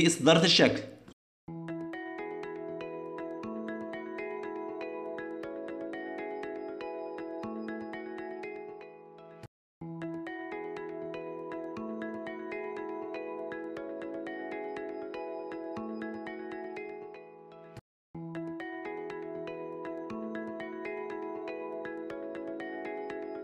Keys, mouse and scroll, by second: 0.3 middle click, 1.4 shift+middle click, 1.6 middle click, 1.8 ctrl+middle click, 2.4 middle click, 3.2 shift+middle click, 4.0 click, 9.1 middle click, 9.8 ctrl+middle click, 10.5 middle click, 11.6 shift+middle click, 12.5 ctrl+middle click, 12.9 ctrl+middle click, 13.2 shift+middle click, 13.3 middle click, 14.0 ctrl+middle click, 14.4 ctrl+middle click, 14.8 shift+middle click, 15.5 middle click, 16.2 ctrl+middle click, 16.7 shift+middle click.